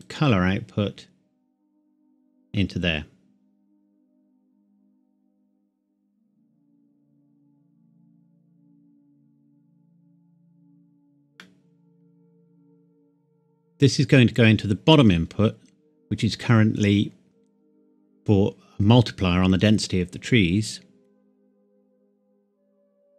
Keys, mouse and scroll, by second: 0.1 click, 4.5 click, 9.3 click, 11.4 middle click, 13.1-15.0 scroll down 1, 20.7 click.